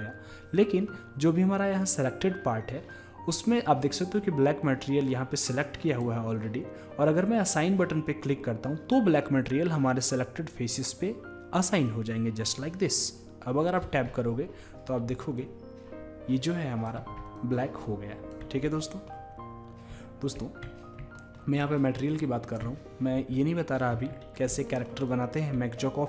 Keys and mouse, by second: 5.9-13.9 drag, 13.9 Tab, 15.4 drag, 15.7 click, 17.4-19.3 drag, 19.3-20.6 middle drag, 21.6-23.4 drag, 25.1-26.0 drag.